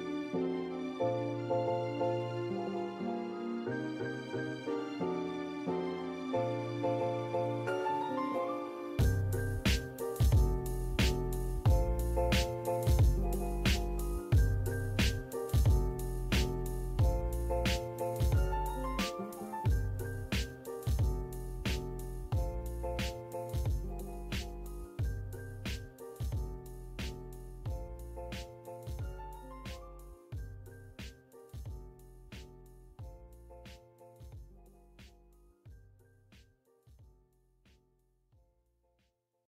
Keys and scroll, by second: 0.2 m, 0.3 space, 3.6 m, 3.7 space, 18.6 m, 18.7 space, 21.7 Escape, 24.2 Escape, 29.0 e, 29.1 space.